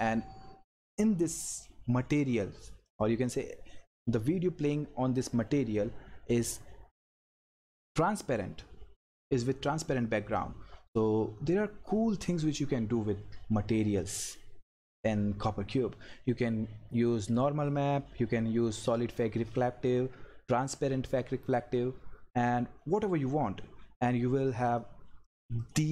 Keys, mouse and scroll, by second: 2.8 click, 17.3 click, 24.7 click.